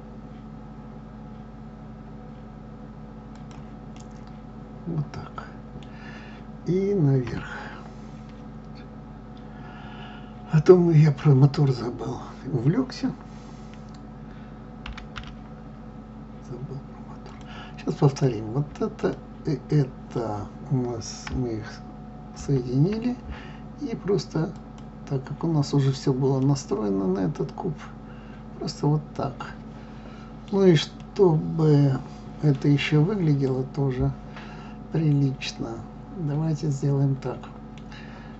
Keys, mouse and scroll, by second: 3.9-7.1 middle drag, 7.1 KP_3, 14.8 g, 17.9 click, 22.1 ctrl+j, 24.8-26.4 drag, 26.4-29.4 middle drag, 31.0-36.7 middle drag.